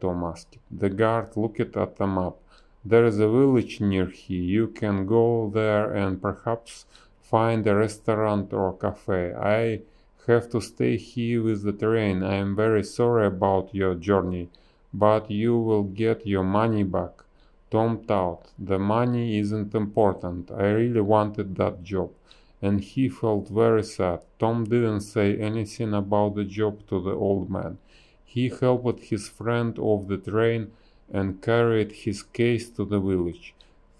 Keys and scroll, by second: 0.7 ctrl+z, 2.0 s, 2.6 a, 7.1 space, 7.3 b, 10.6 a, 11.6 Delete, 12.3 a, 15.1 space, 25.4 space, 26.6 space, 27.9 b, 29.0 space, 29.6 space, 31.4 space, 33.0 ctrl+z, 33.2 ctrl+z.